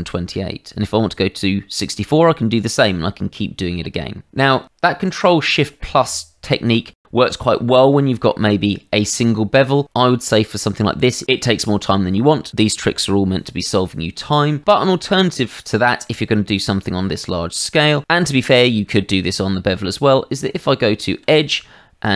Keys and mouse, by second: 6.9 shift+middle click, 8.0 shift+middle click, 9.3 shift+middle click, 14.6 shift+middle click, 15.3 middle click, 20.1 Tab, 21.9 shift+z.